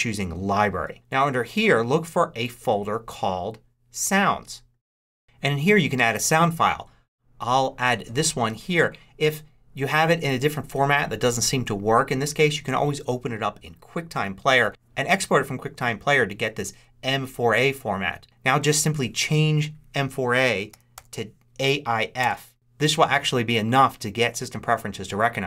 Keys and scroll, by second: 20.2-21.3 typing.